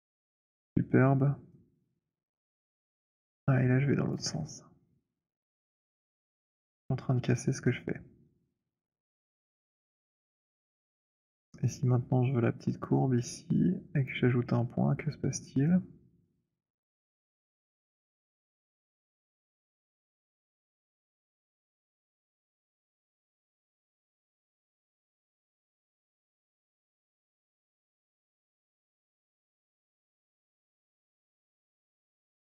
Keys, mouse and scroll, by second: 0.4 click, 4.1 click, 4.1 z, 6.4 click, 6.7 z, 9.6 alt+click, 9.8 alt+middle click, 10.2 alt+click, 10.2 alt+right click, 11.1 alt+middle click, 14.0 click, 16.8 right click, 18.3 click, 21.0 shift+right click, 22.6 w, 24.4 right click, 25.7 click, 28.5 click, 29.9 click, 32.0 click.